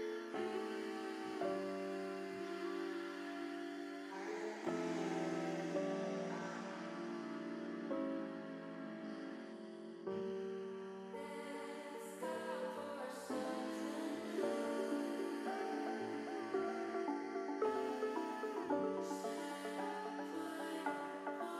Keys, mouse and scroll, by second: 4.4 shift+a, 7.7 click, 9.4 click, 10.9 ctrl+z, 11.3 ctrl+z, 11.9 ctrl+z, 13.3 shift+a, 16.1-17.3 drag, 18.0 middle click, 19.5 middle click, 21.0 ctrl+z, 21.3 ctrl+z.